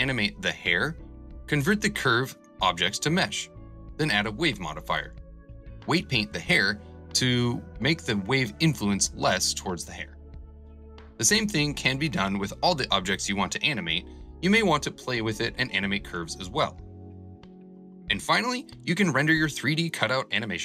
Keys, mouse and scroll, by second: 0.6 click, 1.0 click, 2.2 click, 3.1 click, 4.3 click, 5.2 click, 6.0 click, 6.2-8.3 drag, 10.5-16.6 drag, 16.8-17.9 drag, 20.2 space.